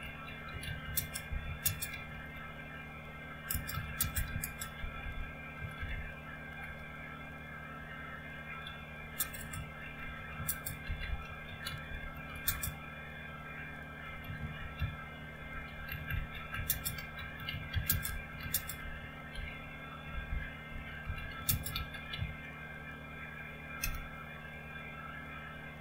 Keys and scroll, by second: 0.0-6.9 typing, 8.5-12.6 typing, 13.8-24.1 typing.